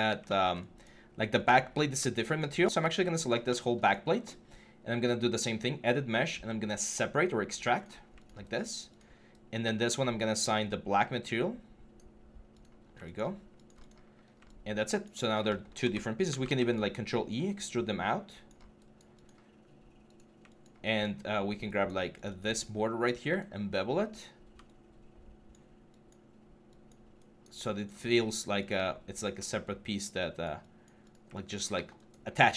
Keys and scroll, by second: 16.1 ctrl+e.